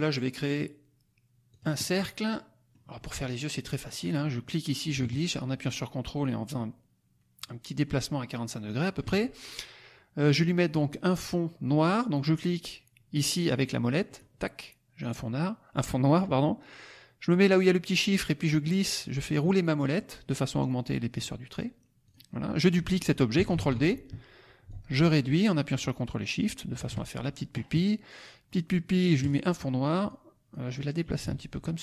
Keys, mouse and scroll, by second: 1.4 click, 1.8-3.3 drag, 3.4 click, 3.8 click, 4.1 scroll up 1, 4.4-9.1 drag, 14.0 click, 18.3-18.9 scroll up 1, 19.2-20.0 scroll up 2, 20.3-20.8 scroll down 2, 22.0 click, 23.5 ctrl+d, 24.6-26.9 ctrl+shift+drag, 29.1 click, 30.0 click, 31.1-31.8 ctrl+drag.